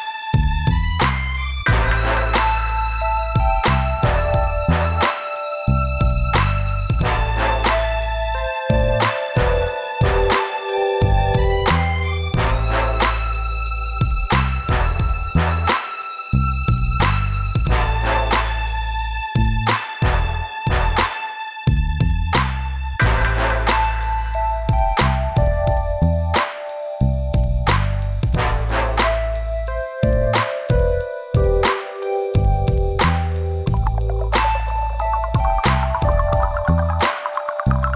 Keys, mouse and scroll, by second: 0.5 click, 1.6 click, 2.7 click, 3.5 click, 4.4 click, 5.1 click, 5.4 click, 8.8 click, 11.5 scroll up 2, 13.6 click, 14.4 click, 15.4 click, 17.6 click, 18.2 click, 19.3 click, 20.4 click, 20.5 click, 21.5 click, 22.2 click, 22.7 scroll down 1, 24.8 scroll down 2, 27.1 scroll up 2, 27.3 click, 27.5 click, 29.5 click, 30.5 click, 32.2 click, 33.0 click, 34.0 click, 35.0 click, 35.6 click, 36.8 click, 37.4 right click.